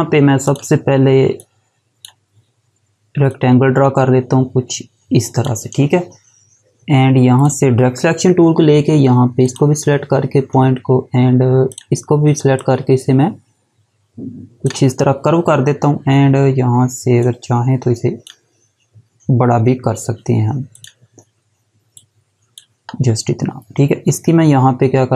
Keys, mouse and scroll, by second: 0.0 click, 9.0 click, 11.3 click, 12.1 click, 16.8 click, 20.3 click, 24.9 click.